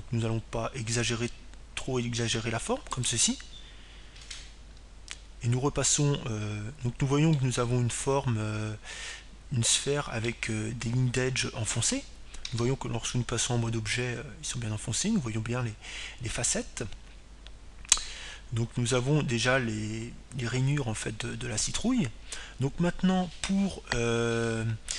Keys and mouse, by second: 4.9-7.0 drag, 9.2-11.2 middle drag, 14.4 Tab, 14.9-16.9 middle drag.